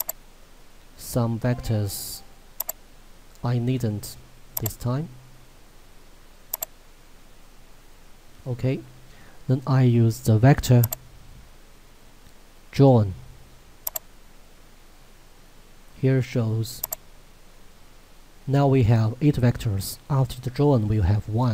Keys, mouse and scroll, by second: 10.9 click, 13.9 click, 16.8 click.